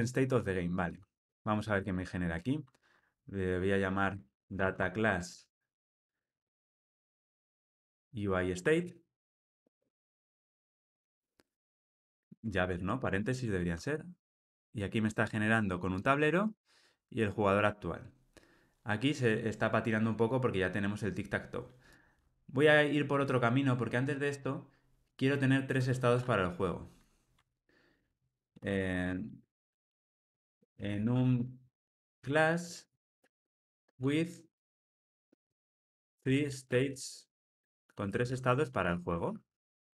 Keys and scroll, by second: 5.7 Tab, 28.4 alt+shift+Left, 29.2 alt+shift+Right.